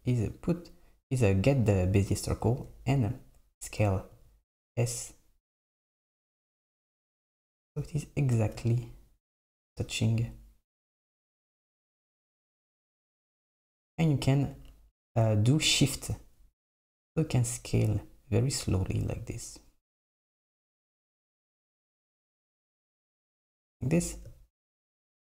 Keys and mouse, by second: 0.4 click, 4.2 s, 11.1 s.